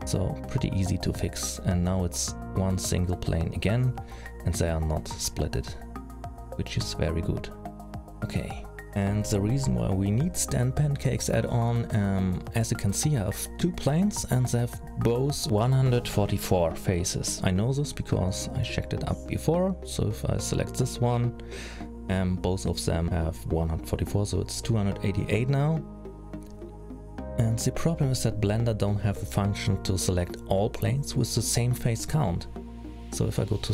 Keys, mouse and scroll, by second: 0.3 shift+n, 2.1-2.6 scroll down 3, 3.5 alt+a, 4.4 l, 5.6 alt+a, 6.6 l, 7.1 h, 7.6-8.2 scroll down 3, 8.1-8.7 scroll up 6, 8.8 middle click, 12.0 middle click, 13.7 l, 22.9 l, 26.4 middle click, 28.2-29.4 scroll down 4, 31.0-31.5 scroll up 2, 32.8 click.